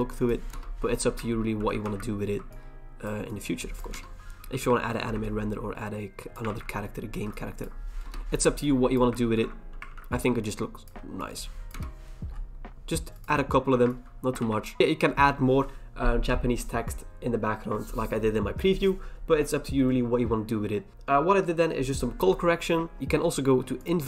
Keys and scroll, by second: 0.5 Return, 1.6 ctrl+j, 1.8 ctrl+t, 3.9 Return, 4.9 ctrl+j, 6.5 ctrl+t, 8.0 Return, 9.3 ctrl+j, 9.9 ctrl+t, 11.7 Return, 13.7 ctrl+j, 14.4 ctrl+t.